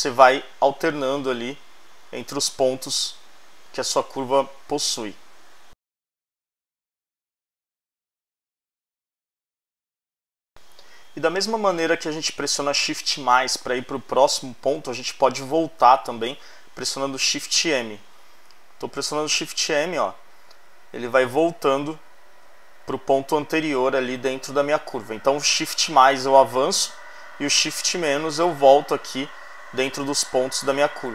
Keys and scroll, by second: 17.4 shift+-, 25.6 shift+=, 27.5 shift+-.